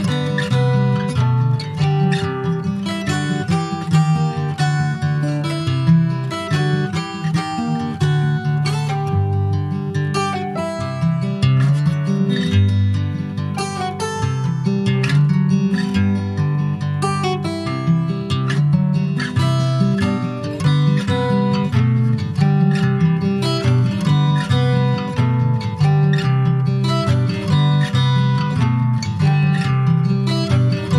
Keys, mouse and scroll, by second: 0.1 Tab, 1.1 3, 1.3 click, 2.4 alt+shift+click, 3.4 alt+shift+click, 3.8-5.2 middle drag, 5.2 alt+shift+click, 5.6 middle click, 6.2 e, 6.5 alt+s, 8.5 scroll down 4, 8.7 middle click, 9.4 Tab, 9.6 click, 9.8 scroll down 2, 10.1 middle click, 10.6-10.9 scroll down 1, 10.9 ctrl+s, 11.0 click, 11.4 middle click, 11.9 ctrl+s, 12.3 click, 12.7 Tab, 13.1 middle click, 13.6 Tab, 13.8 click, 14.2 middle click, 14.6 ctrl+s, 14.7 click, 15.0-15.4 scroll up 2, 15.4 middle click, 16.3 3, 16.5 click, 17.7 3, 17.8 click, 19.9 3, 20.2 click, 21.2 Tab, 21.4 click, 21.9 middle click, 22.5 ctrl+s, 22.7 shift+click, 23.5 Tab, 23.7 click, 25.3 /, 26.2 Tab, 26.6-26.9 scroll up 4, 26.9 middle click, 27.4 2, 27.8 click, 28.3 alt+shift+click, 28.8 alt+shift+click, 29.9 x.